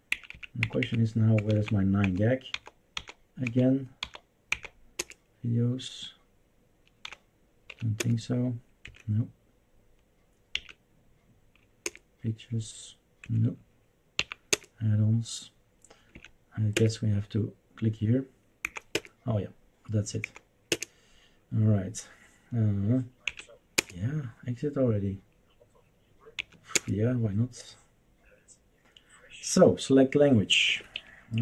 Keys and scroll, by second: 0.1 Up, 0.5 Up, 0.6 Up, 0.8 Up, 1.3 Down, 1.5 Down, 2.0 Down, 2.5 Down, 2.9 Down, 3.6 Down, 4.0 Down, 4.5 Down, 4.9 Return, 7.1 Down, 7.7 Up, 7.9 Return, 8.8 Escape, 10.5 Up, 11.8 Return, 13.2 Escape, 14.1 Up, 14.5 Return, 16.1 Right, 16.7 Return, 18.6 Down, 18.9 Return, 20.3 Down, 20.7 Return, 23.3 Left, 23.7 Return, 26.4 Left, 26.7 Return, 30.4-31.4 typing.